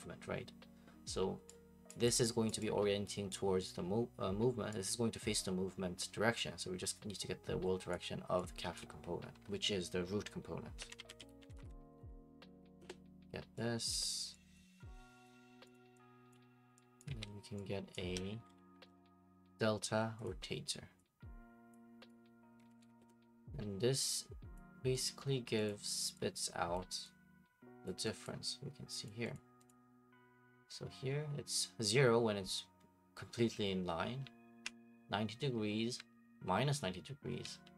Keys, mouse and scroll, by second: 1.9-5.5 drag, 7.9-10.7 drag, 10.6-12.5 typing, 12.8 Up, 12.8 Return, 13.9 click, 13.9 typing, 14.5 click, 15.2 click, 15.7 click, 16.3 click, 17.0 shift+click, 17.2-19.3 typing, 17.9 click, 20.2 click, 21.7 click, 22.1 right click, 22.4-23.4 typing, 24.6 click, 25.0 right click, 25.7 click, 26.8 click, 27.9 click, 28.2 click, 29.1 click, 29.3 click, 29.7 click, 34.2 a, 35.5 d, 36.9-37.7 typing.